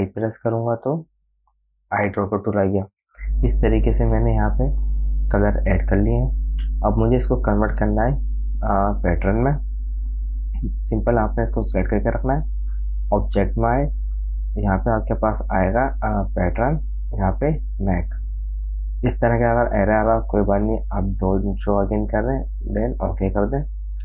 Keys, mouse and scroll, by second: 0.2 i, 2.0 click, 5.2 click, 5.3 v, 6.0-8.0 drag, 8.0 space, 8.3 click, 8.5 space, 13.3 click, 18.4 click, 22.0 click.